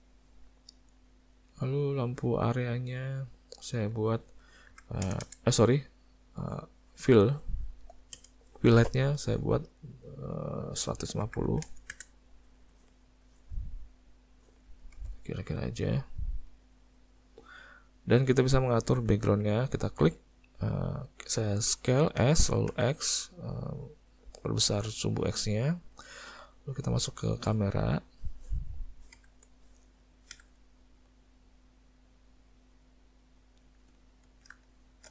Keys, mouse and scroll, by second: 2.5 click, 3.7 click, 5.2 KP_0, 9.1 middle click, 10.4 click, 12.4 middle click, 15.0 g, 16.8 middle click, 17.7 middle click, 18.1 middle click, 18.7 middle click, 19.1 ctrl+middle click, 20.1 click, 22.4 s, 29.2 n, 30.4 n, 34.0 ctrl+middle click, 34.7 shift+middle click.